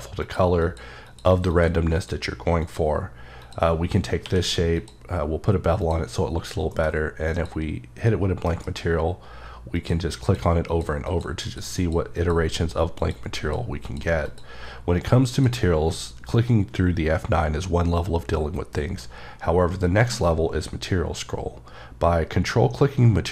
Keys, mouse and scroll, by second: 0.6 click, 0.6 click, 1.5 click, 2.6 click, 3.4 click, 3.7-4.2 scroll up 3, 4.2 q, 4.7 click, 5.3-5.8 scroll up 3, 5.8 click, 6.7 m, 7.3 click, 8.5 F9, 9.7 click, 10.2 click, 10.7 click, 11.1 click, 11.4 click, 11.8 click, 12.1 click, 12.5 click, 13.4 click, 13.8 click, 14.7-15.3 scroll down 3, 15.3 click, 20.1 m.